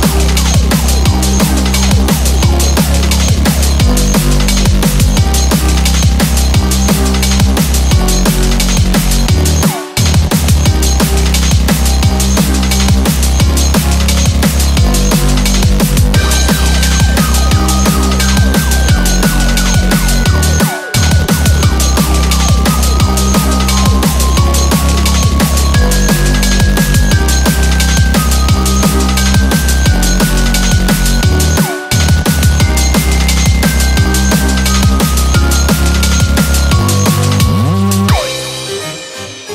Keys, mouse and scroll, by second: 1.1-2.0 scroll down 7, 1.5 middle click, 2.1 middle click.